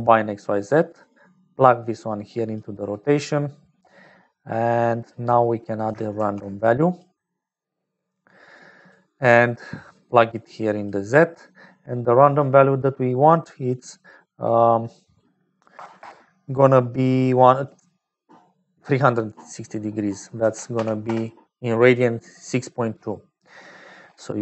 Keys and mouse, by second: 1.8-2.9 drag, 3.1 middle click, 4.1 click, 5.1 middle click, 5.7 click, 6.1 shift+d, 7.2 middle click, 8.8 click, 10.3 click, 11.2 middle click, 13.7-16.8 drag, 17.6-23.2 drag.